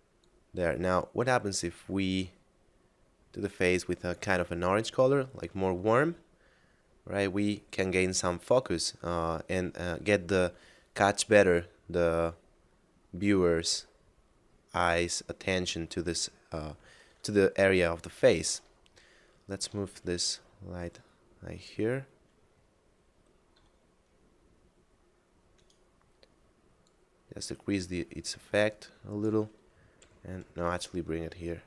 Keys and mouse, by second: 11.9 middle click, 18.9 shift+middle click, 19.9 g, 21.6 click, 23.6 s, 25.6 right click, 26.9 click, 30.1 g.